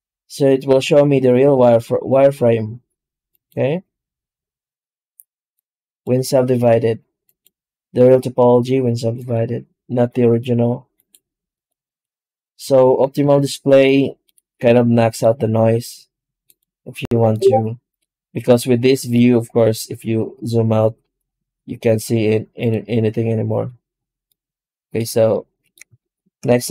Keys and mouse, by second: 0.2-0.6 middle drag, 3.2 click, 5.5 click, 7.1 click, 9.0 click, 10.8 click, 11.4 click, 11.7 click, 12.3 click, 13.7-15.1 middle drag, 16.3 click, 17.1-18.3 middle drag, 22.5 click, 24.2-24.8 middle drag, 25.2 middle click, 25.9 shift+middle drag.